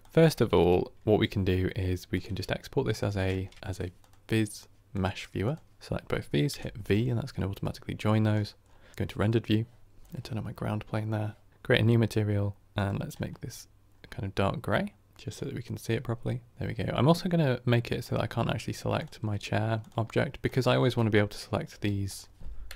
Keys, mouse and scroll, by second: 0.0-2.0 middle drag, 2.0 click, 2.9 x, 4.9 shift+a, 6.4 v, 8.9 click, 10.0 click, 10.1-11.5 middle drag, 11.5-13.0 drag, 16.5 scroll up 1, 17.9-18.9 drag, 19.7 click, 20.4 click, 20.7 g, 21.6 g, 22.6 Right.